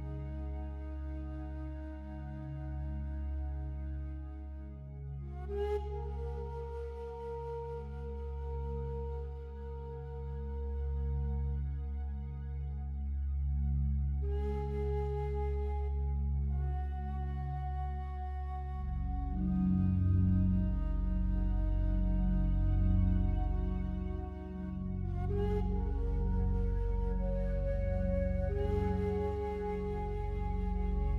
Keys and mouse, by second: 1.2 click, 1.8 click, 3.1 click, 4.1 click, 5.0-7.3 drag, 8.0 click, 8.3 click, 9.1 typing, 10.4 click, 11.2 click, 12.1 click, 12.6 click, 13.4 click, 13.9 click, 14.4-15.5 typing, 16.7 ctrl+alt+click, 17.4 alt+shift+click, 18.3 click, 18.8 click, 19.7-22.0 drag, 23.4 click, 26.6 alt+click, 27.6-28.7 ctrl+alt+drag.